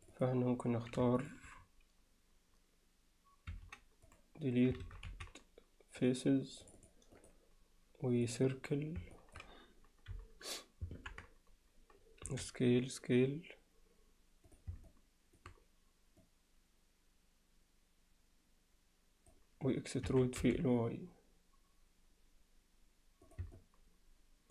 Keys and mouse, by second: 0.0 click, 4.9 ctrl+z, 5.1 x, 6.6 click, 8.0-9.0 right drag, 9.1 alt+middle click, 10.1 KP_1, 11.0 ctrl+KP_1, 12.3 s, 14.9 alt+middle click, 16.3-19.3 drag, 23.6-24.5 alt+middle drag.